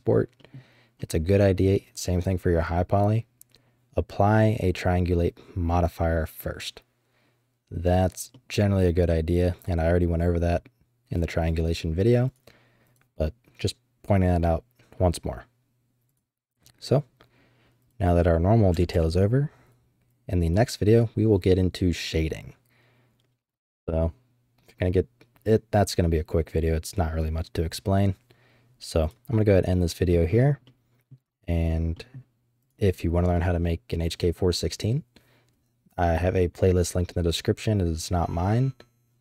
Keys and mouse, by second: 0.3 drag, 0.9-1.6 drag, 8.3 middle click, 12.2 click, 12.9 click, 29.1 click, 29.5-30.0 middle drag, 30.6-31.1 middle drag, 31.9 middle click, 31.9 click.